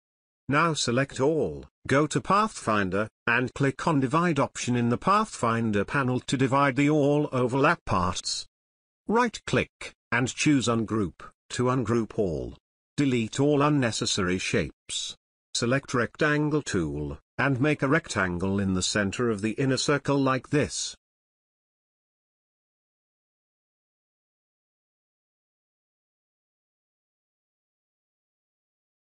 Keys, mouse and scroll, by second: 3.3 click, 4.5 ctrl+z, 6.7 click, 8.3 right click, 9.5-11.0 drag, 11.9 Delete, 13.0 click, 13.2 space, 13.4-14.0 click, 13.7 space, 17.4-18.4 drag, 23.8 space, 23.9 ctrl+click, 24.1 drag, 27.3 space, 27.4 ctrl+click, 28.5-29.1 alt+click.